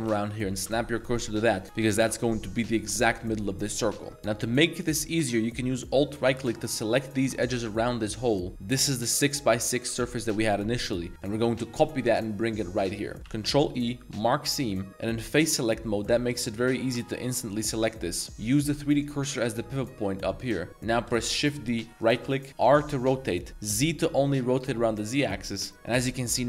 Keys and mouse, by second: 0.1 shift+s, 1.3-1.7 middle drag, 2.0 Tab, 4.0 Tab, 4.1 2, 4.3 a, 4.4 a, 4.9 alt+click, 5.9 alt+shift+click, 7.2 alt+shift+click, 11.1-13.2 middle drag, 13.5 ctrl+e, 15.3 click, 16.8 l, 17.6 middle click, 18.3-19.3 drag, 19.8-20.4 drag, 21.1 shift+d, 22.3-23.6 middle drag, 23.6 z, 25.7 middle click, 25.9 r.